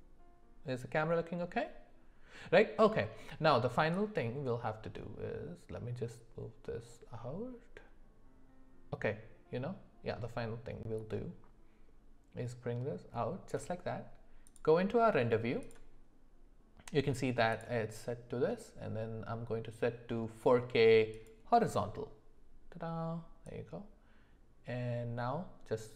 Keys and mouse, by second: 4.1-14.0 drag, 17.5-22.1 drag, 24.0-25.9 drag.